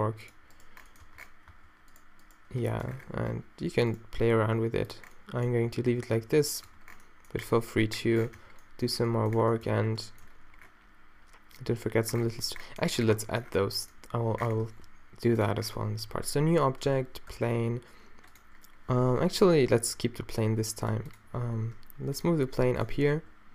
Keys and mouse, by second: 0.3 click, 1.1 Tab, 1.1-2.8 middle drag, 1.6 Tab, 4.2 d, 6.7 Tab, 6.9-8.4 drag, 7.9 Tab, 8.4 Tab, 9.7 a, 14.7 shift+a, 16.1 alt+g, 16.9 Tab, 17.4 x, 19.0 z, 21.4 g, 22.8 g, 22.8 r, 23.2 s.